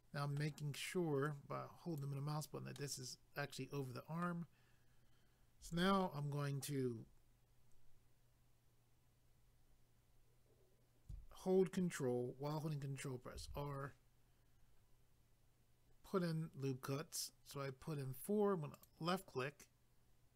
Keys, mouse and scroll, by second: 1.2 click, 2.8 middle click, 13.3 ctrl+r, 14.0-14.6 scroll up 1, 14.6-15.0 scroll up 1, 15.5-15.8 scroll up 1, 18.7 click.